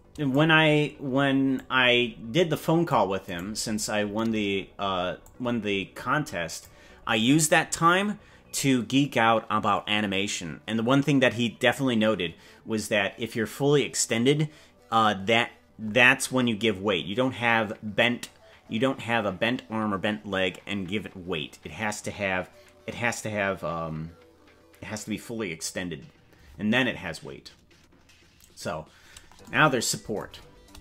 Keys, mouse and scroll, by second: 1.5-3.0 drag, 3.4 right click, 5.2 click.